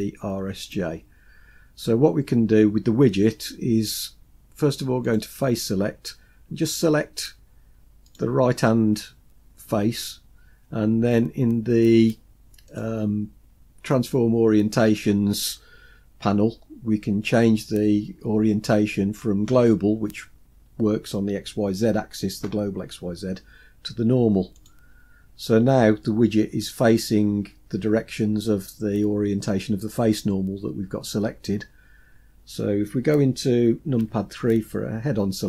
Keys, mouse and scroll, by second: 5.1 click, 8.1 click, 12.7-25.4 drag, 34.1 KP_3.